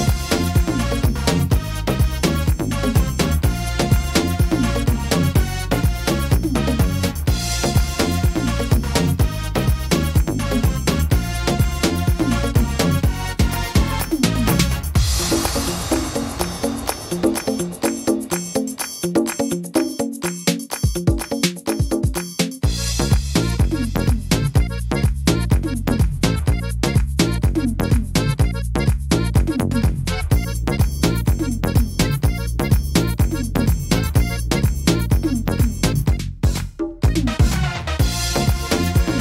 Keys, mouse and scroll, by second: 0.2 right click, 0.9 click, 2.4 right click, 3.0 click, 4.3 right click, 4.9 click, 5.6 middle click, 6.1 scroll down 2, 6.5 middle click, 7.8 right click, 8.3 shift+right click, 8.9 right click, 9.3 right click, 9.8 right click, 10.1 shift+right click, 10.4 middle click, 11.4 shift+right click, 11.8 shift+right click, 12.2 shift+right click, 12.6 middle click, 13.8 click, 14.6 middle click, 15.4 middle click, 17.2 right click, 17.8 shift+right click, 18.3 shift+right click, 19.0 right click, 21.0 right click, 21.7 shift+right click, 22.6 click, 23.8 middle click, 24.3-24.7 scroll down 1, 24.8 middle click, 26.2 middle click, 26.7 scroll up 2, 27.1 middle click, 27.8 shift+middle click, 28.0 shift+middle click, 28.1 scroll up 2, 29.0 middle click, 29.6 right click, 31.3 click, 32.2 right click, 32.5 shift+right click, 32.9 middle click, 33.6 shift+right click, 33.9 shift+right click, 34.6 shift+right click, 35.0 middle click, 36.4 e, 36.9 s, 39.0 middle click.